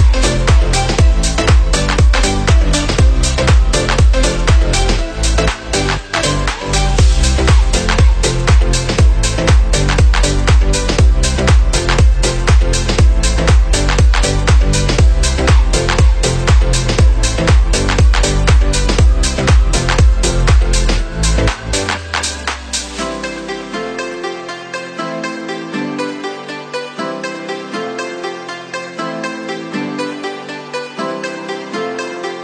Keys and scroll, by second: 4.6 Left, 5.6 Up, 6.4 Left, 7.7 Down, 8.6 Up, 9.7 Right, 10.7 Down, 14.3 Up, 16.8 ctrl+0, 21.9 ctrl+c, 22.1 ctrl+v, 27.0 ctrl+0.